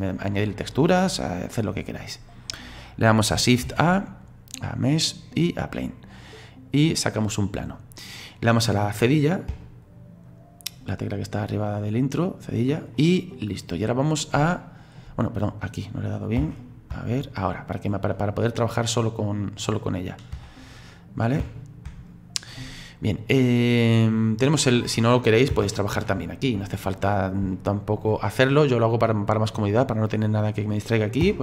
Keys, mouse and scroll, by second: 0.1-3.1 drag, 3.7 shift+a, 6.5-6.9 scroll down 2, 6.9-9.5 middle drag, 9.5 /, 11.5-13.0 drag, 13.0-15.3 middle drag, 15.3 right click, 16.4 /, 16.9 /, 17.7-20.3 middle drag, 20.3 BackSpace, 21.4 /, 21.9 /, 22.6-25.5 middle drag, 25.5 /, 26.2 shift+middle click, 27.1-27.5 scroll up 4, 27.5 shift+middle click, 28.5 scroll up 1, 28.7 middle click, 29.4-31.2 scroll up 1, 31.2 /.